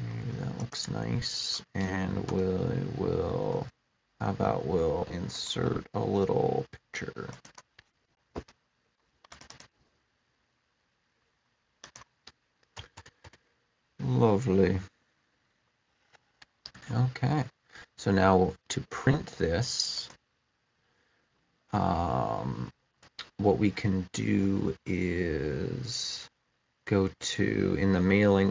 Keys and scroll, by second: 2.0 Return, 12.6 Return.